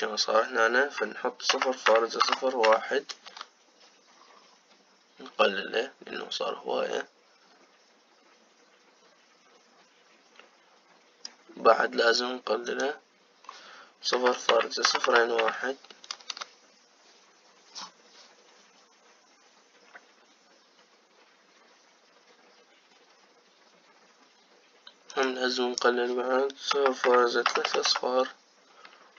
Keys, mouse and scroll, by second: 0.3-3.4 drag, 13.8-16.2 drag, 16.2 KP_0, 26.1-28.8 drag, 28.8 KP_0, 29.0 KP_0.